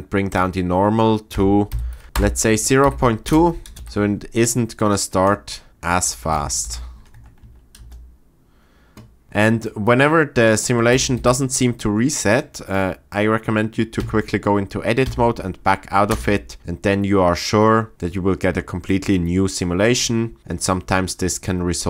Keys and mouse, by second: 0.3-2.2 drag, 2.9 shift+Left, 3.3 space, 3.7 space, 3.8 shift+Left, 5.9 space, 6.7 shift+Left, 7.1 Tab, 7.4 Tab, 7.8 space, 11.2 shift+Left, 14.0 Tab, 15.0 Tab, 16.1 space.